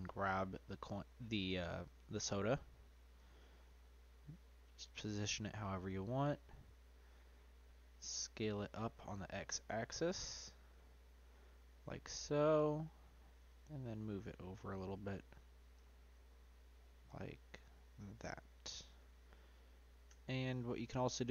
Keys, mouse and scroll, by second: 0.7-1.4 scroll up 2, 1.4-3.1 shift+middle drag, 3.1 g, 5.1-7.0 middle drag, 7.0 s, 10.9-13.4 middle drag, 13.4 g, 15.7 s, 18.8 click, 19.3-20.0 middle drag, 20.0 Tab, 20.5 click, 21.0-21.3 right drag.